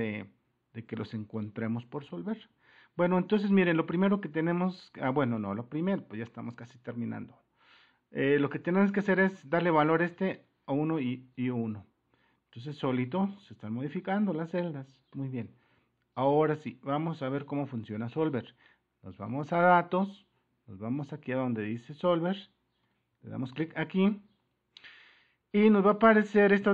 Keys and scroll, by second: 0.0 Return, 2.2 1, 2.5 Return, 5.4 Up, 14.1 super+1, 23.1 super+-.